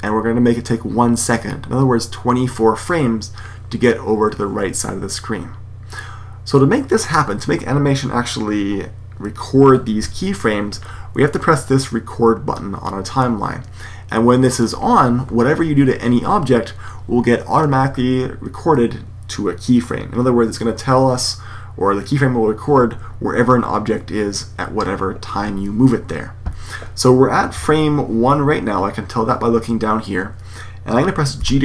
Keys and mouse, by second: 14.5-16.3 drag, 31.3 g.